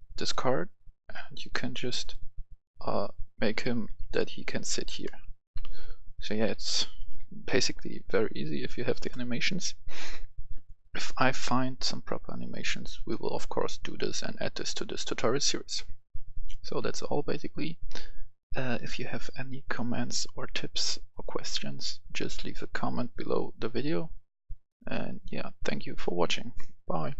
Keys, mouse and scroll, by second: 1.4 click, 3.2 right click, 3.3 a, 3.8 w, 5.0 right click, 5.2-7.1 typing, 6.4 right click, 8.2 a, 11.7 click, 16.5 F10, 18.7 click, 23.4 click.